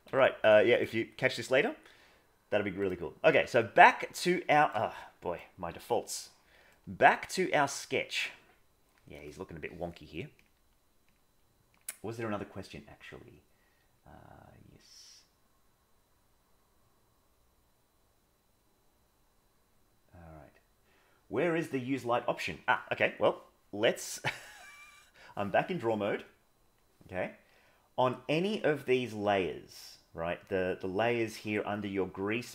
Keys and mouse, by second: 2.7 click, 3.6-4.8 shift+middle drag, 5.0 middle click, 5.6 KP_1, 6.2 middle click, 7.6 middle click, 10.3 click, 11.1-11.8 drag, 24.2-25.2 drag.